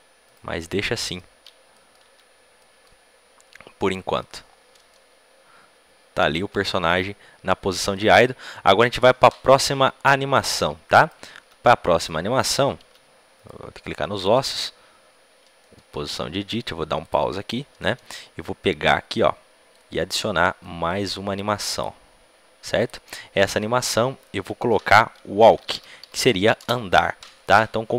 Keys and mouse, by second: 0.8-1.9 middle drag, 1.3 Tab, 2.0 Tab, 5.1 click, 5.7 middle click, 6.3 click, 10.9-15.1 right drag, 11.3 Tab, 12.8 Tab, 14.1 Tab, 15.5-16.9 middle drag, 16.9-26.5 drag.